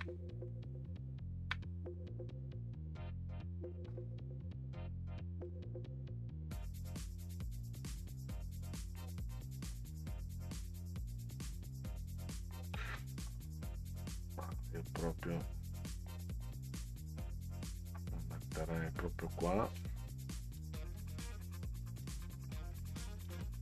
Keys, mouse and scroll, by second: 0.5 middle drag, 1.1-1.4 ctrl+scroll up 2, 5.5-11.5 drag, 16.1 click, 18.0 click, 19.6 click, 22.1 Down.